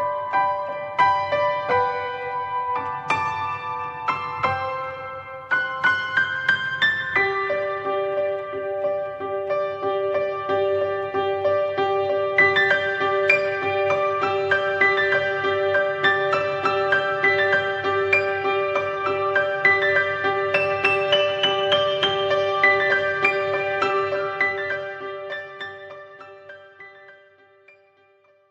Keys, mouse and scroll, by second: 0.3 click, 3.4-4.3 middle drag, 4.3 click, 9.8-10.2 middle drag, 10.2-10.7 scroll up 1, 10.7 middle drag, 11.0-11.5 scroll down 2, 11.8 click, 15.1-16.4 middle drag, 16.4 click, 18.2-19.7 middle drag, 19.7-20.4 scroll up 2, 20.4 r, 23.7 click, 25.5-26.1 middle drag, 26.1 click, 26.4 shift+middle click, 26.6-27.0 scroll up 1, 27.0-28.5 middle drag.